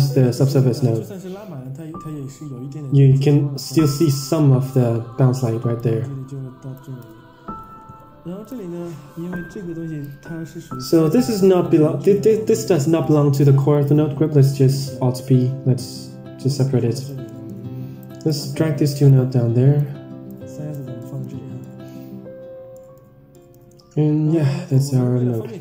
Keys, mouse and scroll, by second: 3.6 click, 5.6-7.1 drag, 7.2 Tab, 8.4 click, 9.3-10.0 drag, 10.4 middle click, 11.4 middle drag, 12.1 click, 12.5-12.9 drag, 13.6 click, 14.3 alt+p, 15.3 g, 17.2 middle click, 17.9 click, 19.0 click, 20.2 click, 20.9 middle click, 21.5-21.8 middle drag, 22.6 middle drag, 23.2 middle drag, 24.6 click.